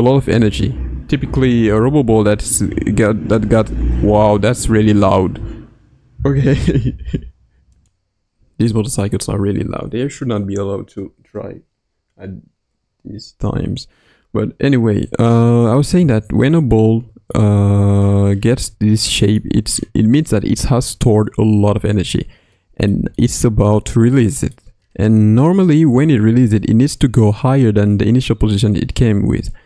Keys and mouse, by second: 16.5-18.0 middle drag, 19.1-19.7 shift+middle drag, 22.5-22.9 middle drag, 23.1-24.5 shift+middle drag.